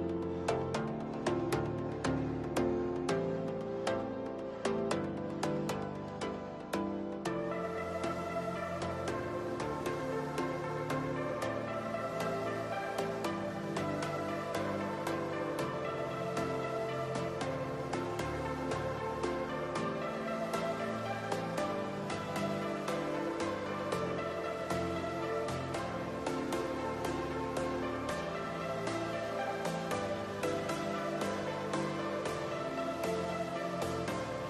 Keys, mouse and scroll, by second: 0.7 n, 1.9 shift+a, 4.7-8.9 drag, 8.9 KP_1, 10.6 click, 11.7 click, 12.3 click, 13.4-14.1 scroll up 5, 14.1-14.5 shift+middle drag, 14.5-15.0 scroll up 2, 15.0 shift+middle click, 15.7 click, 17.2 click, 18.0-20.5 drag, 23.4 click, 25.2 click, 26.1-27.7 drag, 27.7 KP_0.